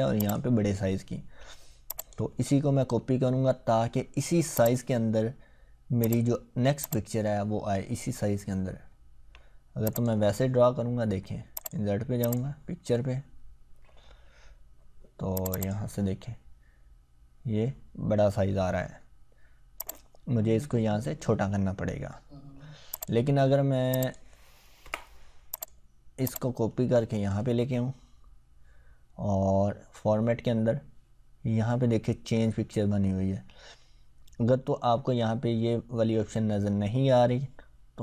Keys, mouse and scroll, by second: 4.5 click, 9.8 click, 15.3 click, 19.9-21.3 drag, 24.9 Delete, 25.5-29.8 drag.